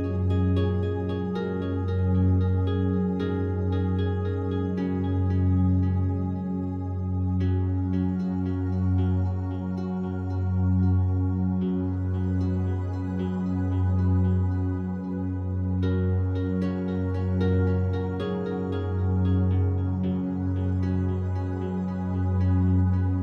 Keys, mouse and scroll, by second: 0.0 g, 1.2 Escape, 2.2 click, 2.8 alt+click, 3.2-4.9 alt+drag, 5.0 click, 5.9-7.1 drag, 7.1 1, 8.8 e, 9.5 Escape, 10.5 ctrl+z, 11.0 ctrl+z, 11.9 alt+click, 13.5 click, 13.7 click, 14.9 alt+shift+click, 15.9 shift+click, 16.1 shift+click, 17.0 alt+click, 17.6 1, 18.3 e, 19.7 Escape, 20.4 ctrl+z, 21.3 ctrl+z, 22.5 alt+click.